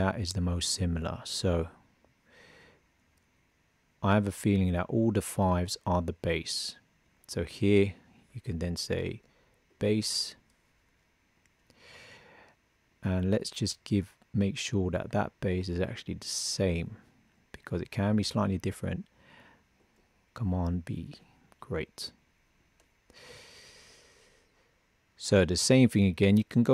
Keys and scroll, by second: 19.7 super+v.